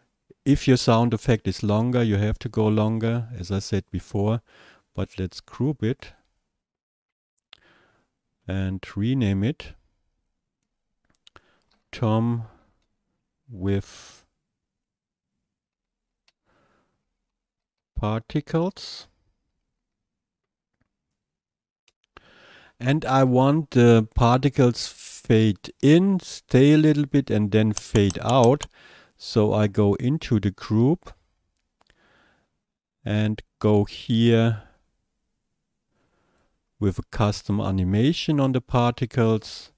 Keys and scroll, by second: 12.6-13.3 typing, 16.5-20.6 typing, 21.9 Return.